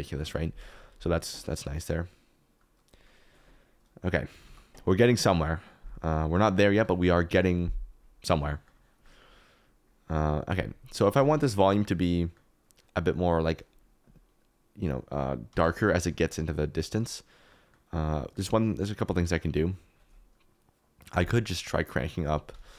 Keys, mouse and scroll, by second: 0.1 ctrl+z, 4.4 ctrl+s, 6.7 middle click, 8.5 click, 9.1 click, 10.2 click, 17.4 middle click, 18.3-19.6 drag, 19.7 click, 21.7 click, 21.9-22.7 drag.